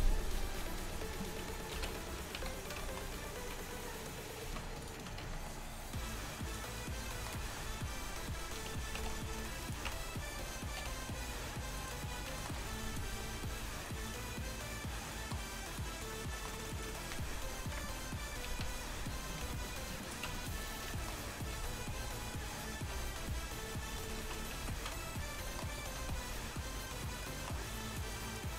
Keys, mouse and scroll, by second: 1.8 alt+h, 2.4 a, 3.5 z, 4.5 z, 5.3 shift+a, 8.8 Tab, 9.0 s, 9.9 Tab, 10.9 r, 14.1 drag, 14.3-15.3 middle drag, 15.8-17.8 drag, 17.8 KP_1, 18.5 z, 19.5 g, 20.3 Tab, 21.6 v, 23.0 c, 24.0 right click, 24.2 ctrl+z, 24.6 ctrl+z, 26.0 c.